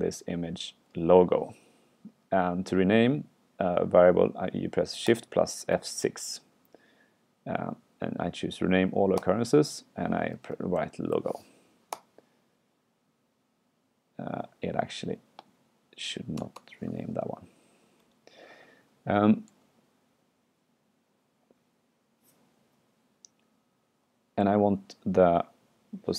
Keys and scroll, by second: 19.6 super+Left, 24.5 super+Right.